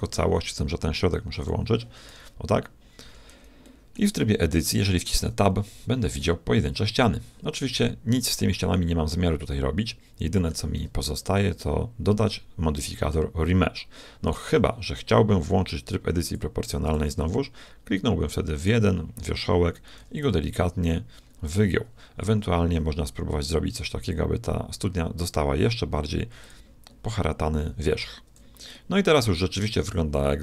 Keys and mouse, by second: 1.4-3.3 drag, 2.1 r, 3.6 click, 3.7 middle click, 5.2 Tab, 6.7-8.1 middle drag, 10.7 Tab, 11.5-13.3 middle drag, 14.2 Tab, 16.3-18.0 drag, 18.6-20.5 right drag, 20.0 g, 28.0 Tab, 28.7-30.4 middle drag.